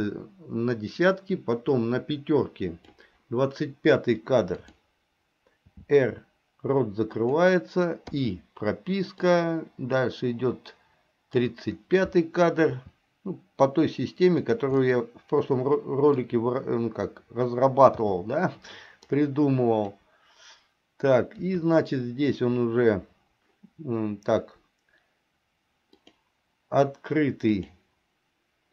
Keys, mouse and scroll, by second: 0.0-3.1 drag, 4.6 click, 5.8 r, 8.3 i, 9.3-11.6 drag, 12.8 r, 14.9-16.3 middle drag, 19.2 click, 21.5 KP_3, 26.1 click, 27.7 click.